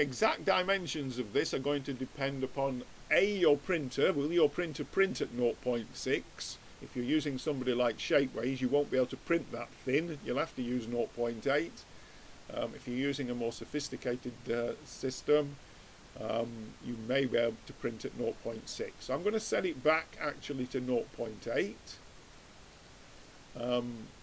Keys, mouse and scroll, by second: 13.2 middle click, 13.4 middle click, 14.3 middle click, 14.5 middle click, 14.7 middle click, 15.1 middle click, 15.5 middle click, 18.3-20.1 drag, 23.5-24.2 middle drag.